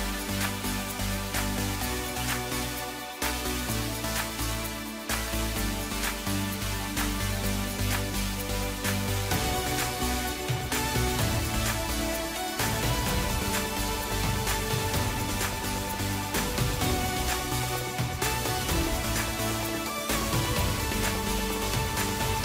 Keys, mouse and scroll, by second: 0.6-2.7 right drag, 2.7-3.2 scroll down 1, 3.2-6.3 middle drag, 7.0 s, 8.7 KP_1, 9.5-11.2 scroll down 1, 11.2-14.3 drag, 14.4-19.3 drag, 19.3-20.4 scroll down 1, 20.4 r.